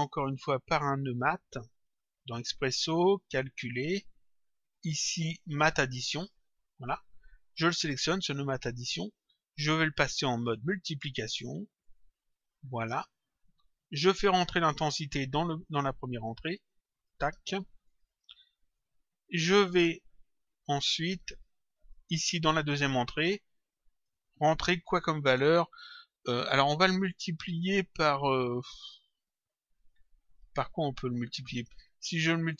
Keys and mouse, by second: 2.1 click, 3.6 click, 5.5 click, 7.6 click, 8.9 click, 10.5 click, 11.8 click, 13.4 click, 15.8 click, 17.9 click, 20.6 click, 21.8 click, 23.3 click.